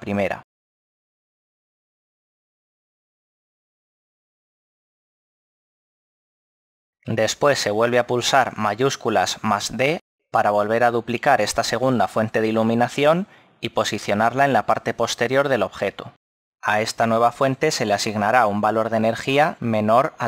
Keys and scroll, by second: 6.9 KP_7, 7.7 7, 8.6 shift+d, 19.3 ., 19.5 2, 19.9 Return.